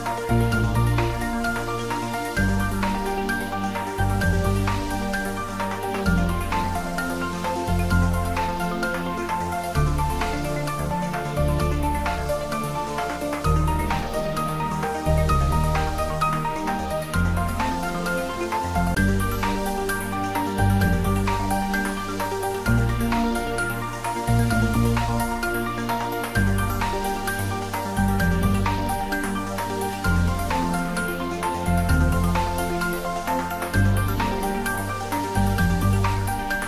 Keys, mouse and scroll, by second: 0.1 middle click, 0.9 shift+click, 1.3 middle click, 2.4 shift+click, 2.6-3.4 scroll down 1, 3.6 alt+e, 4.2 click, 10.0 click, 10.8-11.2 scroll down 1, 15.8 s, 16.4 click, 16.9 e, 18.0 click, 18.4 ctrl+z, 19.9 alt+e, 20.4 click, 24.6 click, 25.4 g, 25.8 z, 27.7 click, 28.4 scroll down 1, 28.7-29.5 scroll up 1, 29.5-33.2 middle drag, 33.2-33.5 scroll up 1, 33.5-35.5 middle drag, 35.5-36.6 middle drag.